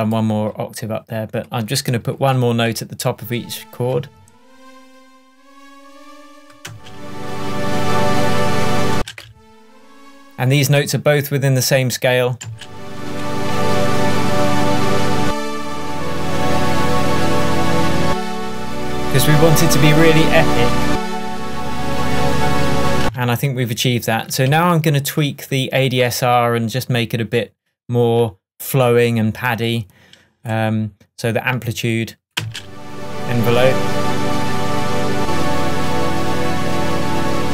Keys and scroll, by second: 9.0 space, 12.5 space, 13.8 alt+p, 19.5 Up, 22.6 shift+Tab, 32.4 space.